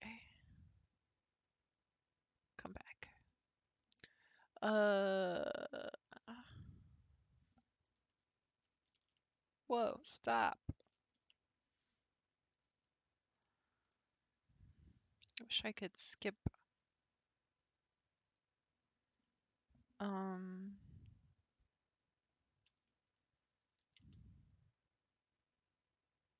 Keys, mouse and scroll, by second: 5.5 click, 5.9-6.5 scroll up 7, 6.5-9.0 middle drag, 9.0 ctrl+e, 11.2 ctrl+r, 13.4-16.1 middle drag, 16.1 click, 18.3-21.4 drag, 22.9 middle click, 23.8 g.